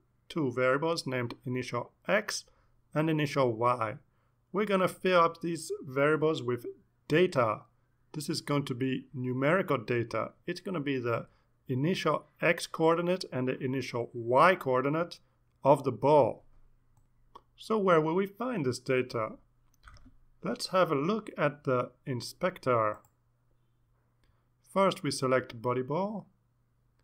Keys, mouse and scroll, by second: 24.3 click, 25.1 click.